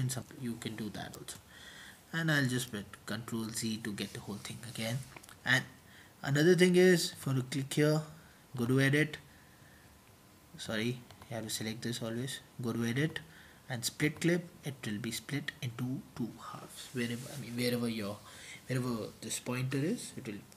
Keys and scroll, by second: 0.1 Return, 2.8 Return, 2.8 typing, 7.0-7.7 typing, 11.6 typing.